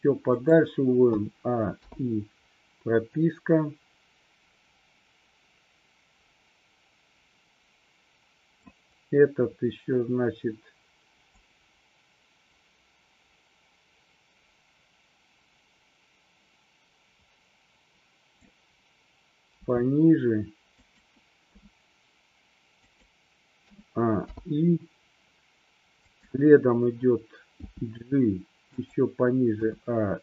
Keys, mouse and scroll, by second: 1.2 a, 1.9 i, 3.2-8.8 drag, 11.4-18.7 drag, 19.5 g, 20.9 click, 21.5 s, 22.9 click, 23.7 a, 24.3 i, 26.2 click, 27.7 g, 28.8 click, 29.7 a.